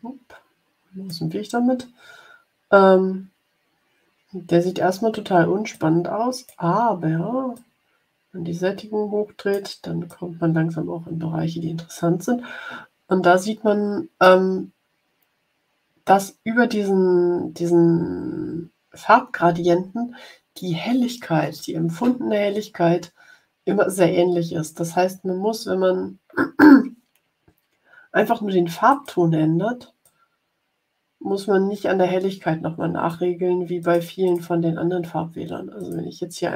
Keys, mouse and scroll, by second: 0.0 click, 0.4 click, 5.6 click, 7.5-9.7 drag, 10.0-14.3 drag, 28.8-33.2 drag, 33.7 click, 34.2 click, 35.7 click.